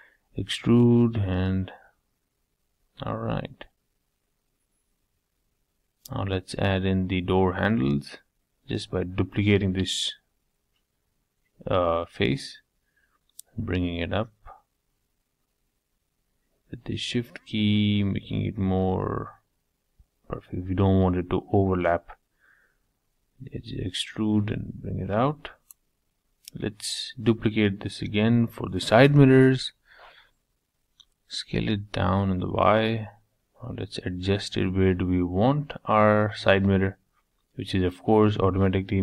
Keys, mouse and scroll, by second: 0.6-2.6 middle drag, 3.8 middle click, 4.6 click, 4.8 middle click, 5.2 scroll up 2, 5.5-7.1 shift+middle drag, 7.1 shift+d, 9.4 s, 12.3 g, 17.2 scroll up 5, 17.5 shift+middle click, 18.2 scroll down 1, 18.4-21.1 middle drag, 21.1 e, 23.1 middle click, 23.6-25.6 scroll down 3, 25.6 shift+d, 28.7 s, 30.7-32.2 middle drag, 32.2 g, 33.5 g, 35.6 g, 37.0-38.2 middle drag, 38.2 e.